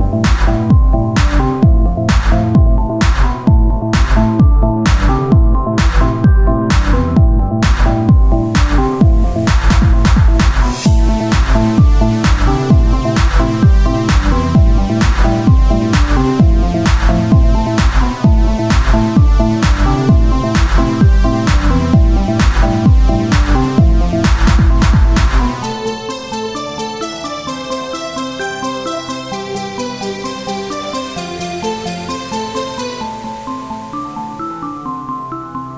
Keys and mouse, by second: 1.3 KP_1, 2.4 e, 4.1-6.2 drag, 6.2 r, 8.1 c, 10.2 click, 10.8-13.4 right drag, 11.3 c, 11.8-13.4 drag, 12.2 z, 13.7 right click, 14.9 click, 15.8 e, 17.4 s, 18.8-20.0 drag, 20.3 Tab, 22.6 Tab, 26.6-28.7 drag, 26.8-28.1 right drag, 28.7 Tab, 31.0 Tab, 31.6 ctrl+Tab.